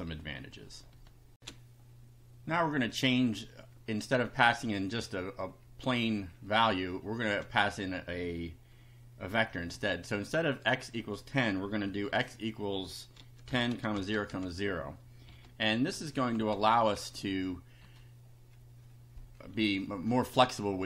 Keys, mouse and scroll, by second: 1.3 ctrl+r, 2.9 click, 7.5 Return, 9.3 x, 9.7 =, 11.8 [, 12.9-15.3 typing, 16.5 Up, 17.0 shift+Home, 17.3 shift+Delete, 20.3 Down.